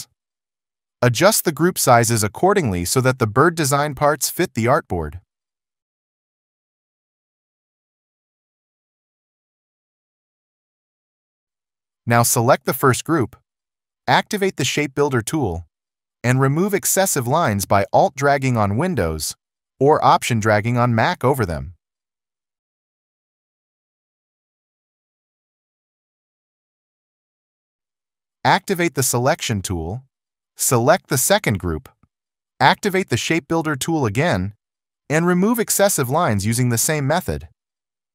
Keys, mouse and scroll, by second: 2.5 alt+shift+click, 8.3 alt+shift+click, 11.2 alt+shift+click, 15.1 alt+scroll, 18.2 alt+click, 20.0 alt+click, 21.8 alt+click, 23.3 alt+click, 23.8 alt+click, 24.8 alt+click, 25.8 alt+click, 26.4 alt+click, 26.8 alt+click, 30.1 ctrl+0, 33.8 alt+scroll, 35.1 alt+click, 37.7 alt+click.